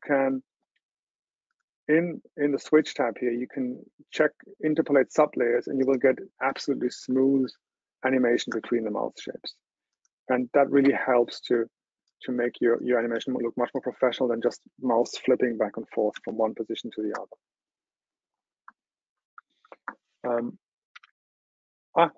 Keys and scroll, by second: 21.0 super+w.